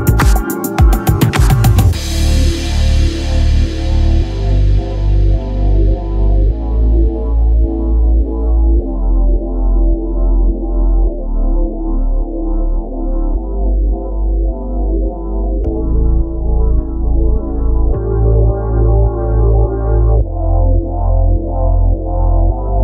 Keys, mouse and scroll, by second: 2.9 middle click, 3.8 middle click, 4.3 middle click, 6.6-8.6 middle drag, 8.6-9.9 right drag, 9.6-11.7 drag, 12.2-14.3 drag, 14.7-16.3 drag, 16.3-17.4 right drag, 16.8 x, 17.4 middle click, 19.5 click, 19.6 middle click, 19.7 click, 19.8 middle click, 19.9 click.